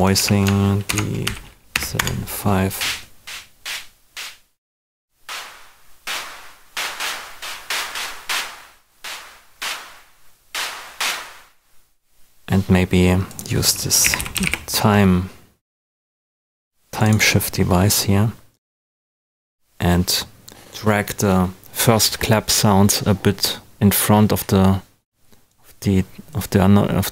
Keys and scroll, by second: 0.1 super+a, 0.8 shift+super+d, 1.2 shift+#, 1.7 5, 1.9 Return, 13.8-14.9 typing.